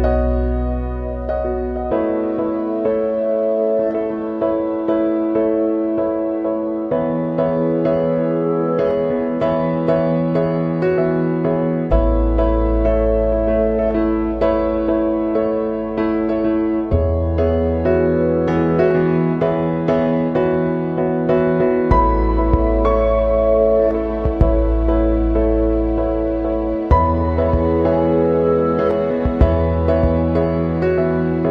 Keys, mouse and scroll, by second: 1.3 click, 1.3 typing, 2.4 click, 7.0 click, 8.2 click, 8.2 click, 13.9 click, 16.2 click, 17.1 right click, 18.3 click, 19.6 click, 21.6 click, 25.6 click, 27.1 click, 29.1 click, 30.0-31.5 drag.